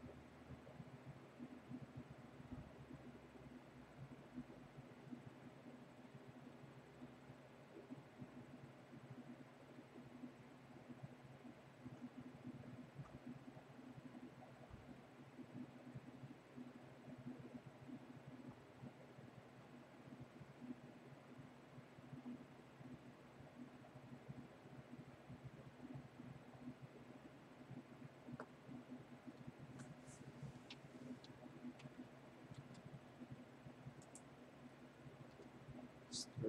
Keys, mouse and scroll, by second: 29.4 click, 31.7 Tab, 32.5 a, 34.2 right click.